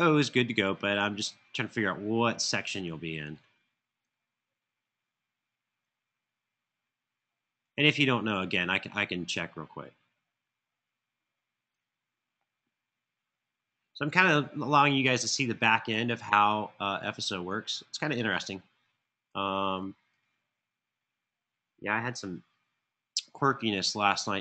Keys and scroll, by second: 14.2 Return, 14.7 Return, 14.8-15.4 typing, 19.6 typing.